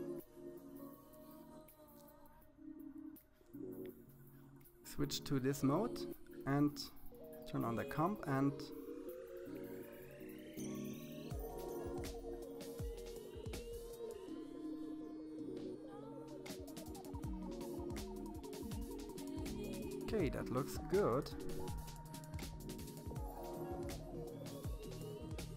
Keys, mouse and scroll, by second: 0.5-2.0 middle drag, 2.3 KP_3, 4.9 click, 5.9 click, 6.9-9.1 scroll down 2, 9.1-10.9 drag, 15.4-17.1 drag, 18.7-20.2 middle drag, 21.0 KP_3, 22.0-24.2 scroll down 1, 24.2-25.5 drag.